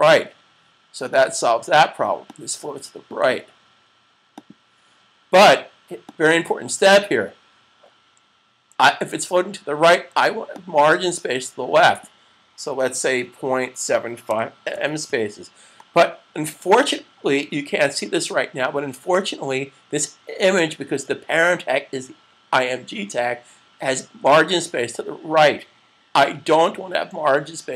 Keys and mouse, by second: 10.5 click, 13.0-14.8 typing, 16.0-17.6 typing.